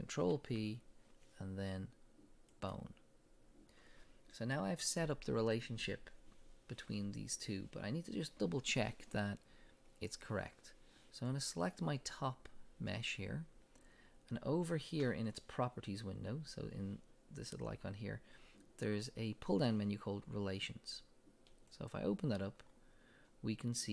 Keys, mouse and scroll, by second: 0.1 right click, 0.1 click, 0.2 ctrl+p, 11.3 click, 21.7 click, 22.8-23.3 scroll down 1.